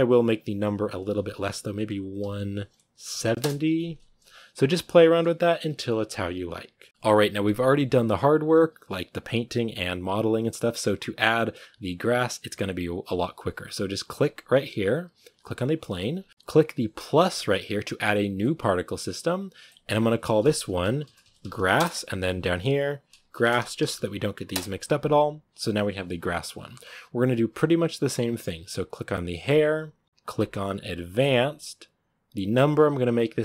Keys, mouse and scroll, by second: 3.2 click, 5.4 z, 6.9-14.1 shift+middle drag, 14.1-18.4 right drag, 18.4-21.6 drag, 21.6 s, 29.3-33.4 drag.